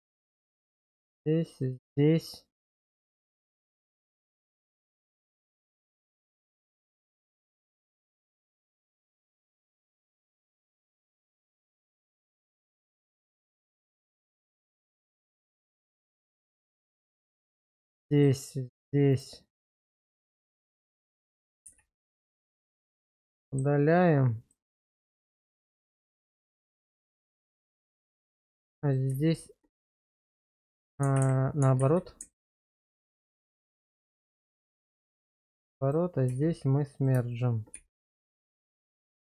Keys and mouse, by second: 1.0 shift+click, 1.6-4.8 middle drag, 7.1 shift+click, 8.5 ctrl+x, 9.8 shift+middle click, 10.9 middle click, 11.4 shift+middle click, 12.5-16.2 middle drag, 16.9 click, 18.2 shift+click, 21.7 ctrl+x, 22.5 middle click, 23.4 shift+middle click, 24.5-26.2 middle drag, 26.6 Tab, 28.4 1, 29.8 1, 30.3 middle click, 31.8 ctrl+z, 32.4 ctrl+z, 32.9 ctrl+z, 33.4 ctrl+z, 33.9 middle click, 34.6 shift+middle click, 35.4 click, 36.3 1, 37.8 1, 38.4 Tab, 39.0 click.